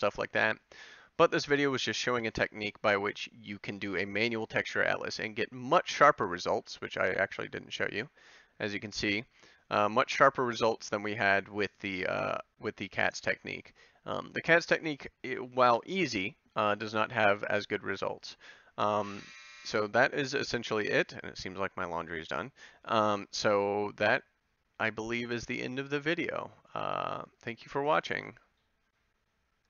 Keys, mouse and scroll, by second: 14.1-15.2 middle drag, 16.0 middle click.